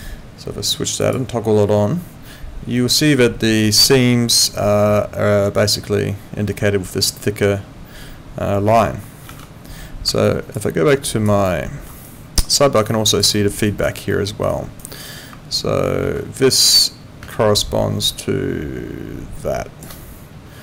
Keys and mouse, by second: 9.5 ctrl+4, 10.2 alt+click, 10.6 alt+right click, 11.0 alt+click, 11.4 alt+middle click, 12.0 alt+click, 13.3 alt+middle click, 13.7 alt+right click, 14.1 alt+middle click, 14.5 alt+right click, 16.0 ctrl+2.